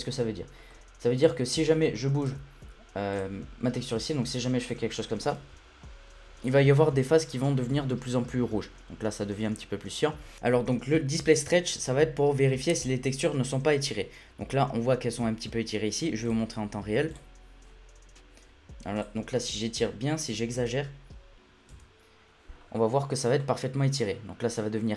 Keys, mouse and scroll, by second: 0.5 scroll up 1, 0.7-1.1 middle drag, 1.1 click, 1.5 scroll down 1, 1.8-2.2 middle drag, 2.2-3.8 drag, 5.3 l, 10.2 scroll up 2, 10.3 shift+middle click, 16.3-19.0 drag, 19.6 click, 20.8 scroll up 2, 20.9 scroll down 1, 21.5 scroll down 3, 22.3-23.4 scroll down 13, 23.4-24.6 scroll up 6, 24.6 scroll down 1.